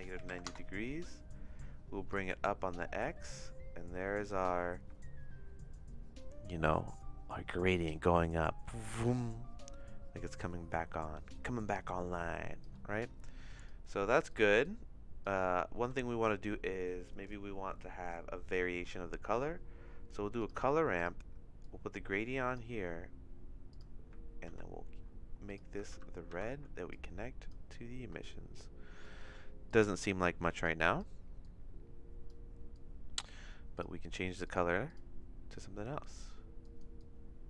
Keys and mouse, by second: 2.2-12.6 shift+drag, 13.6 click, 14.6 click, 15.7 shift+a, 21.6 click, 23.7 click, 24.4 ctrl+c, 25.9 ctrl+v, 26.3 ctrl+v, 26.9 click, 29.0 click, 29.7 click, 30.6 click, 31.4 click, 32.7 click, 34.4 click, 34.8 click.